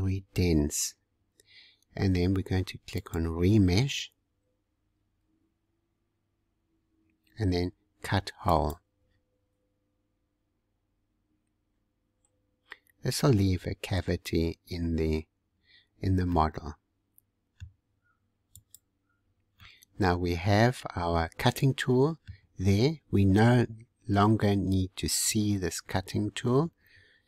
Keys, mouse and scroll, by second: 3.0-6.5 drag, 8.4-14.9 drag, 15.8-16.3 scroll down 2, 16.3-18.5 middle drag, 18.5 click, 19.6-22.6 middle drag.